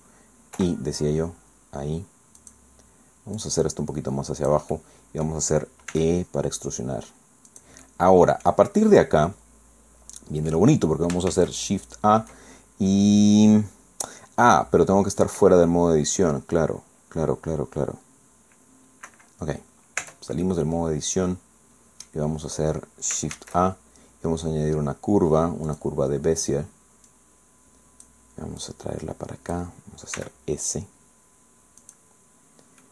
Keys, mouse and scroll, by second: 0.6 i, 2.4 click, 3.4-4.7 drag, 4.7 click, 5.9 e, 7.5-8.7 drag, 8.8 scroll down 2, 9.2-10.7 drag, 11.3 shift+a, 19.1 Escape, 19.6-19.9 scroll down 2, 20.0 Tab, 20.5 click, 21.0 scroll down 1, 22.1 scroll up 1, 22.3 scroll down 1, 23.3 shift+a, 25.7 click, 26.1 scroll down 1, 27.1-28.3 drag, 28.6-29.7 drag, 30.1 s, 31.8 click, 32.8 click.